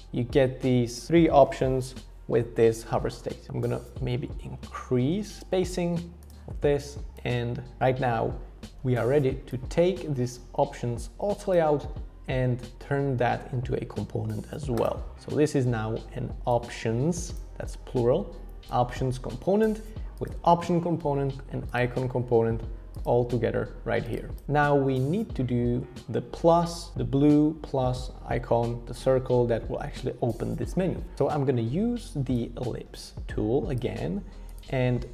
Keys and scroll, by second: 4.6 Up, 4.8 Up, 4.9 Up, 5.1 Up, 5.2 Up, 5.4 Up, 5.4 Return, 31.2 o.